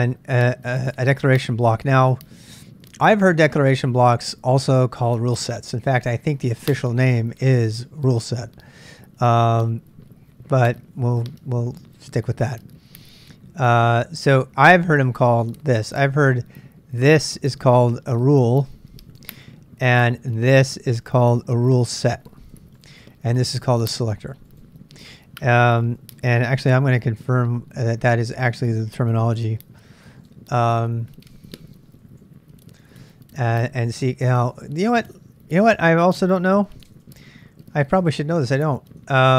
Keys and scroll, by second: 27.3 super+Tab, 30.3 shift+/, 31.7-33.3 typing, 35.8-37.5 typing, 38.1 super+Tab.